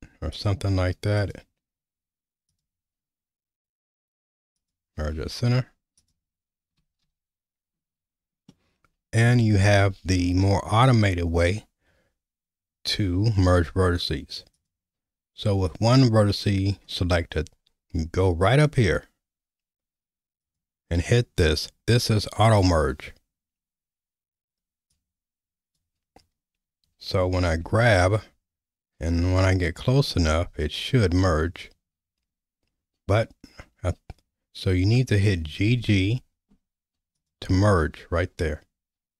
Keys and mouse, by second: 0.4-1.3 drag, 2.6-4.8 drag, 6.0 click, 7.0 ctrl+z, 8.6 middle click, 14.5 click, 20.4 click, 24.9 click, 27.5 g, 35.6 g.